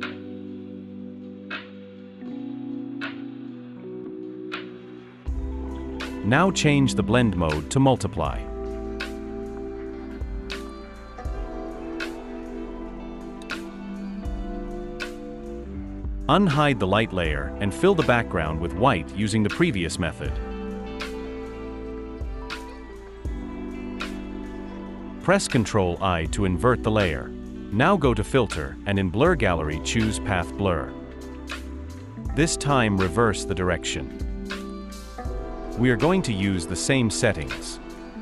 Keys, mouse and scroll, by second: 21.8 shift+F5, 25.6 ctrl+i.